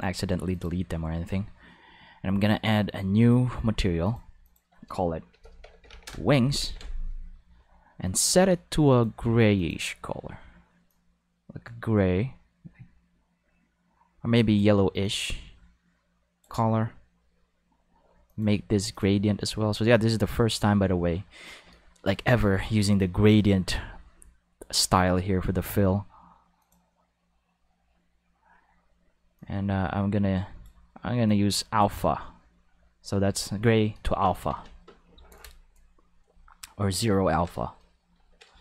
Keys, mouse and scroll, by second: 0.5 click, 3.2 click, 4.0 click, 4.4 click, 5.3 shift+w, 5.4 1, 5.6 n, 5.8 g, 6.6 ctrl+s, 8.1 click, 8.9 click, 9.5 click, 10.9-16.4 drag, 18.2 click, 18.9 click, 26.6 click, 29.3-30.6 drag, 31.2 click, 34.5 ctrl+s, 38.2 ctrl+middle click, 38.5 shift+middle click.